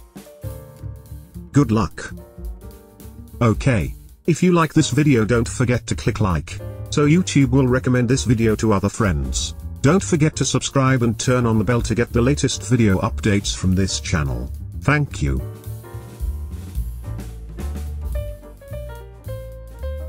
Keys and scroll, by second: 2.5 space.